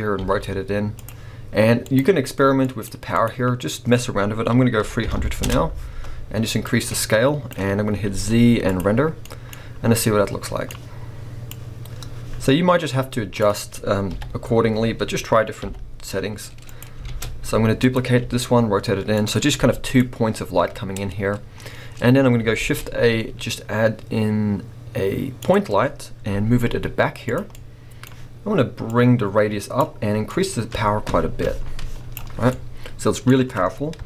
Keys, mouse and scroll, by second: 0.2 r, 1.8 click, 2.9-9.2 drag, 5.5 Return, 8.9 z, 9.2-11.5 middle drag, 9.5-10.1 scroll up 2, 11.5-16.9 drag, 14.1 KP_7, 14.7 scroll down 1, 15.7 g, 17.1 shift+d, 17.9 click, 18.1 r, 19.3 click, 19.6 g, 20.0 click, 21.0-22.4 scroll up 1, 25.5 shift+a, 27.3 g, 27.5-29.0 middle drag, 29.0-32.5 drag, 32.5-34.0 middle drag, 33.9 KP_0.